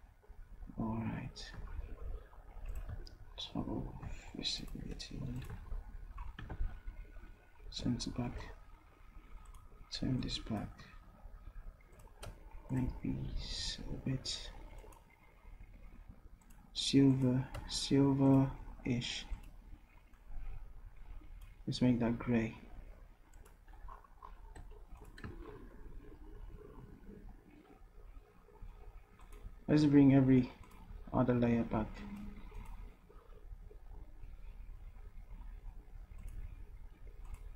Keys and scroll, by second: 7.6 ctrl+shift+Down, 24.9 v.